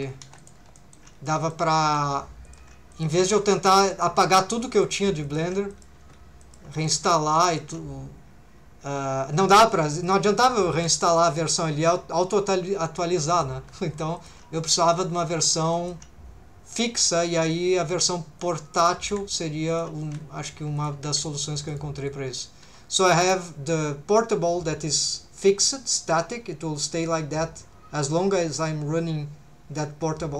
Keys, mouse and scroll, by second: 0.2 1, 0.4 click, 0.8 shift+middle click, 1.3 middle click, 1.8 g, 2.4 shift+click, 2.9 click, 3.1 g, 3.9 shift+click, 4.7 click, 4.9 g, 5.2 shift+click, 5.7 click, 6.0 g, 6.4 shift+click, 6.7 right click, 6.9 g, 7.4 shift+right click, 7.4 shift+click, 10.0 click, 10.7 r, 11.1 click, 13.3 click, 13.6 g, 14.2 shift+click, 14.9 click, 15.2 middle click, 15.7 shift+middle click, 18.4 click, 19.0 r, 19.7 shift+click, 20.0 g, 20.8 shift+click, 21.1 c, 21.7 right click, 22.1 click, 22.6 3.